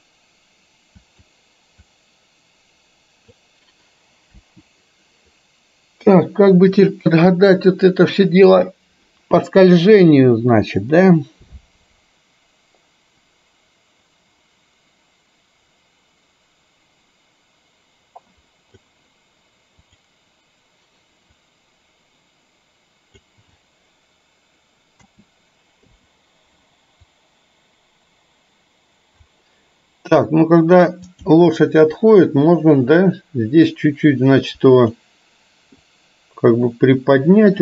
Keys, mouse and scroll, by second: 2.0-3.5 drag, 4.4 Delete, 10.9-18.9 drag, 21.8-23.5 drag, 25.0 a, 25.9 i, 27.2-29.4 drag, 31.2 click, 34.9 click, 36.0-37.6 drag.